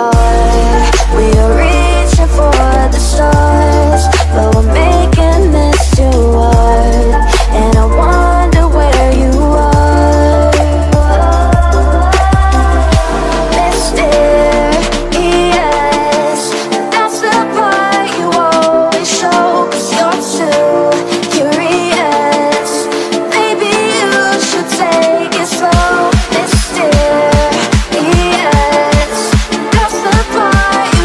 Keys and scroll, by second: 0.4 z, 2.0 x, 2.3 space, 4.2 ctrl+space, 4.4 ctrl+space, 5.1 ctrl+space, 5.4 x, 7.2 space, 7.6 x, 9.2 z, 10.2 space, 10.8 space, 12.2 ctrl+space, 12.5 ctrl+space, 12.8 x, 14.8 x, 16.7 space, 17.2 space, 17.7 ctrl+space, 17.9 x, 18.9 x, 20.6 space, 21.1 space, 22.6 ctrl+space, 23.4 x, 25.0 x, 26.4-29.1 typing.